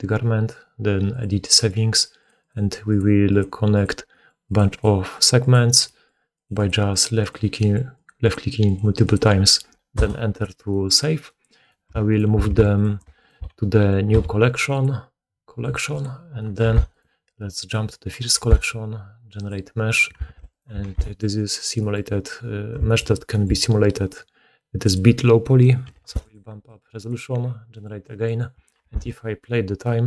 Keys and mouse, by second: 11.5 right click, 12.0 shift+right click, 12.7 right click, 12.9-20.1 shift+middle drag, 13.1 shift+right click, 14.1 m, 16.6 1, 16.8 right click, 18.3 1, 19.4-26.3 drag, 20.2 alt+a, 20.4 right click, 20.8 alt+q, 25.9 7, 26.3 middle click, 26.6-30.0 drag, 28.8 shift+space.